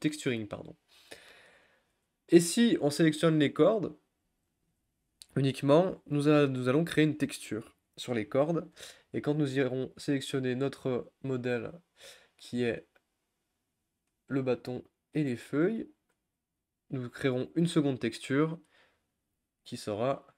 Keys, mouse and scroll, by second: 1.9-3.9 scroll down 6, 3.9-9.3 middle drag, 9.3 Tab, 10.0 click, 12.8 shift+click, 14.2 shift+click, 16.1 Tab, 17.7 a, 20.0-20.3 middle drag.